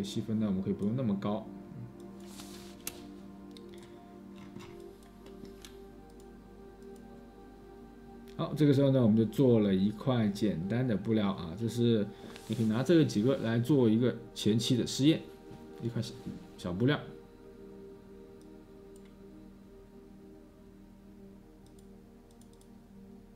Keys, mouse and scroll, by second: 3.3 space, 3.4-5.0 scroll.